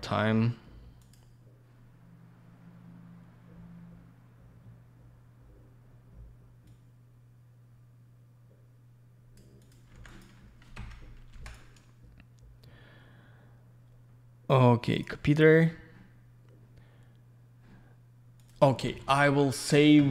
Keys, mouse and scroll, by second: 1.0 click, 1.1 click, 6.7 click, 9.6 click, 9.7 click, 10.1 click, 10.2 double click, 10.8 F4, 11.5 right click, 11.5 right click, 14.9 click, 15.0 click, 18.4 click, 18.5 click, 19.3 alt+middle click, 19.7-20.1 alt+scroll down 1.